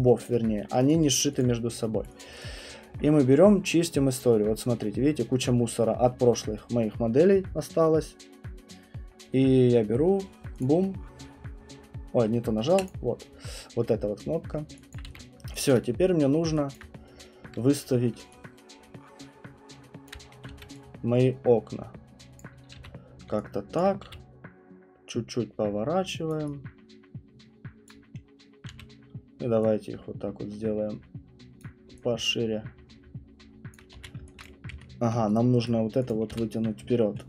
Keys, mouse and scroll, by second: 0.0 click, 0.2 click, 0.7 right click, 0.9 click, 1.1 click, 1.4 click, 2.0 right click, 2.2 click, 2.4 click, 4.4 scroll, 6.3 middle click, 6.5 middle click, 6.5 scroll, 10.6 click, 12.9 click, 14.6-18.9 alt+middle click, 14.9 alt+click, 15.1 w, 15.8 alt+click, 16.7 alt+click, 17.0 scroll, 18.2-18.6 scroll, 18.2-20.5 typing, 20.1 click, 22.4 click, 22.8 f, 23.1 middle click, 23.3 middle click, 23.8 alt+click, 24.0 e, 26.3 click, 28.0 click, 28.7 r, 31.6 click, 33.8 alt+click, 33.9 q, 34.4 click, 34.7 ctrl+1, 35.6 right click, 36.1 click, 36.3 w, 36.9 alt+middle click.